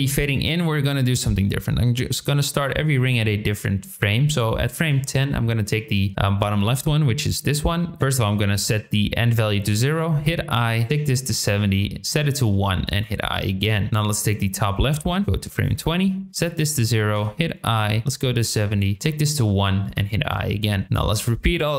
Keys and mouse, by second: 0.9-2.4 drag, 5.2 shift+middle click, 10.9 click, 12.0 click, 14.2 middle click, 15.2 click, 16.3 click, 17.8-18.4 drag, 18.9 click, 20.8 middle click, 21.1 click.